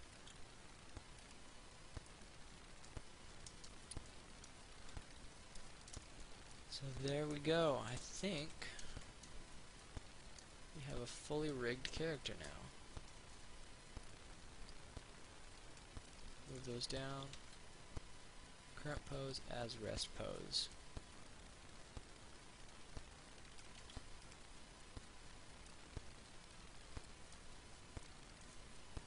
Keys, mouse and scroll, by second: 0.5 ctrl+r, 1.5 click, 2.3 middle click, 3.6 scroll down 1, 4.6 middle click, 5.0 scroll down 1, 11.1 right click, 12.4 shift+right click, 14.3-16.3 drag, 16.3 middle click, 17.6 ctrl+a, 19.3-20.5 drag, 20.7 middle click, 21.4-24.0 drag, 24.2 ctrl+a, 24.5-25.6 drag, 26.0-29.0 middle drag.